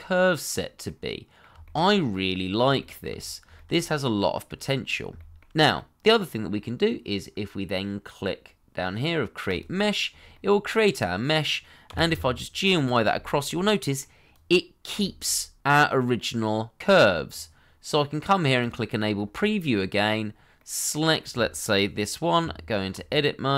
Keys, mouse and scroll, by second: 1.1 middle click, 1.6 shift+middle click, 2.1 middle click, 2.8 shift+middle click, 3.1-3.5 scroll up 1, 3.5 shift+middle click, 3.8 middle click, 4.8 scroll down 1, 5.1 shift+middle click, 5.7 middle click, 10.2 scroll down 1, 10.3 middle click, 12.1 y, 13.5 middle click, 15.0 shift+middle click, 19.1 scroll up 1, 19.4 middle click, 22.4 Tab.